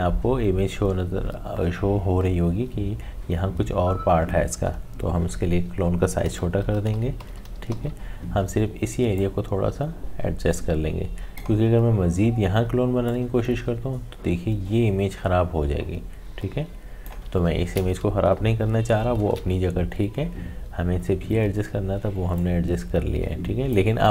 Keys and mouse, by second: 6.2-7.7 typing, 9.1-19.2 drag, 19.2 ctrl+z, 22.4-24.1 drag.